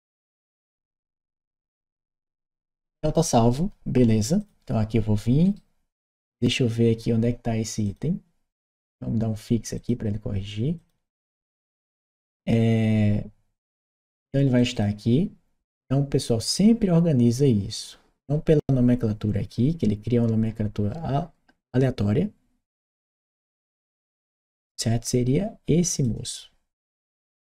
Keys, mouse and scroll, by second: 1.3 middle click, 4.2 click, 5.2 right click, 7.6 click, 8.4 click, 8.4 right click, 9.6 click, 10.6 click, 12.0 click, 13.5 click, 14.4 click, 14.5 click, 25.7 click.